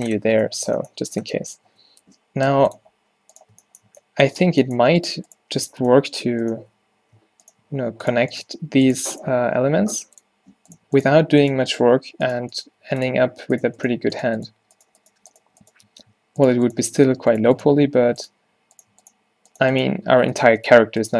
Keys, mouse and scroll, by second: 0.0 a, 1.7 Tab, 6.9 z, 9.4 x, 12.9 x, 17.9 x.